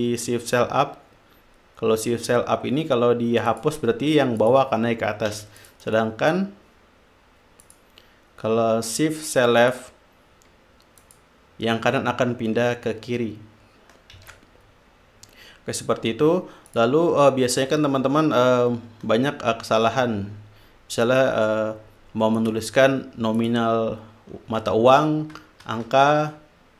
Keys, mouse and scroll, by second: 3.9 click, 4.7 click, 5.7 ctrl+z, 5.9-6.9 ctrl+drag, 6.2 ctrl+right click, 8.0 click, 10.0 click, 11.4 click, 14.5 ctrl+z, 17.1 click, 21.4-21.9 shift+drag, 22.7 click, 23.7 click.